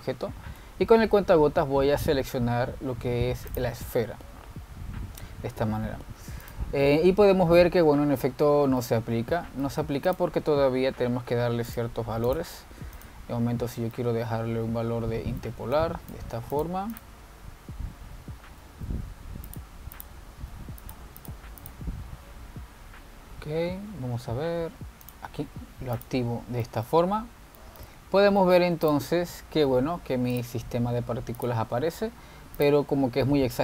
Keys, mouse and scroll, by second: 0.9 click, 7.5 drag, 7.9-10.3 middle drag, 10.3-10.8 scroll down 1, 10.8-11.1 middle drag, 11.1 click, 11.8-12.8 scroll down 4, 12.8 click, 14.2 click, 15.0-16.9 middle drag, 16.9 click, 17.5 x, 18.0 click, 20.1 z, 21.0 click, 21.6 z, 22.3 click, 22.7 click, 23.3-25.4 scroll up 15, 26.2 drag, 27.1 click, 27.8-28.4 shift+middle drag, 28.4 scroll up 2, 28.8-29.2 shift+middle drag, 29.2-29.6 scroll down 2, 29.6-30.0 shift+middle drag, 30.0 click, 31.5 drag, 32.5 click.